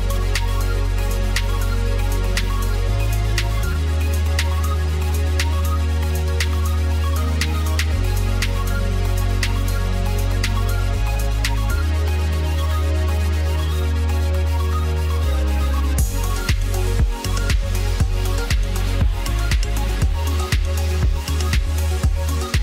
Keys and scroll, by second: 3.1 ctrl+q.